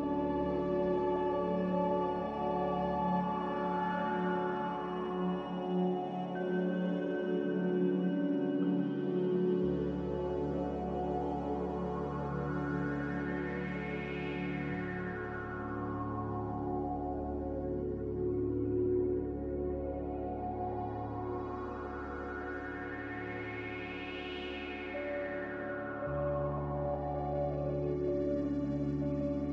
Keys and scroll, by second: 4.1 ctrl+z, 4.6 ctrl+z, 10.5 4, 10.7 Return, 15.0 4, 15.1 Return, 27.7 s, 28.8 typing.